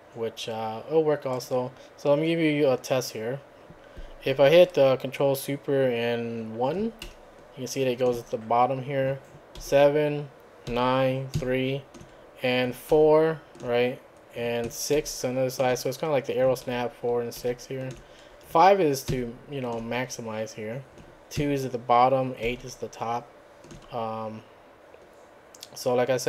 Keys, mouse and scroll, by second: 1.3 click, 7.0 ctrl+super+KP_1, 9.6 ctrl+super+KP_7, 10.7 ctrl+super+KP_9, 11.4 ctrl+super+KP_3, 12.9 ctrl+super+KP_4, 15.0 ctrl+super+KP_6, 16.7 ctrl+super+KP_4, 17.4 ctrl+super+KP_6, 19.1 ctrl+super+KP_5, 21.4 ctrl+super+KP_2, 22.5 ctrl+super+KP_8.